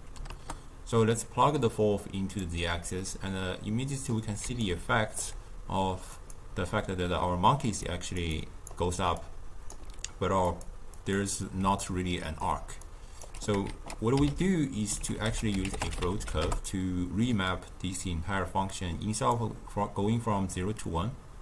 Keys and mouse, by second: 4.4 d, 4.6 right click, 5.2 d, 5.3 d, 6.0-7.8 drag, 7.8 d, 7.9 click, 8.7 d, 9.2 right click, 9.3-9.8 d, 10.5-11.5 drag, 11.5 d, 11.8 click, 12.3-12.7 d, 13.6 ctrl+a, 18.7-21.4 drag.